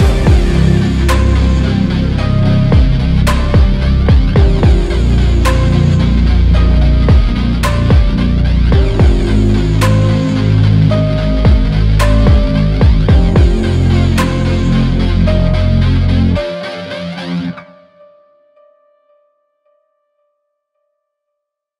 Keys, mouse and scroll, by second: 6.4 alt+click, 11.8 alt+click, 13.3-14.1 scroll up 1, 14.9 z, 15.5 shift+click, 17.8 alt+click, 18.3 alt+click, 18.4 alt+click.